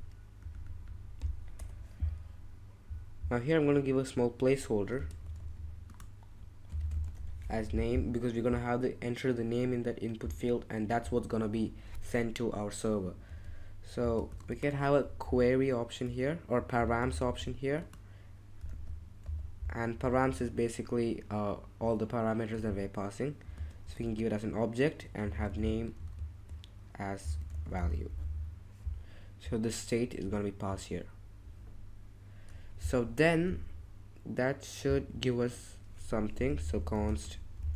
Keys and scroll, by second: 1.6 BackSpace, 4.9-8.3 typing, 7.6 Escape, 13.3-17.8 typing, 18.7 super+z, 19.7-20.7 typing, 22.6 shift+;, 23.5 shift+space, 23.8 shift+[, 25.0-28.2 typing, 34.7 typing, 36.1-37.7 typing.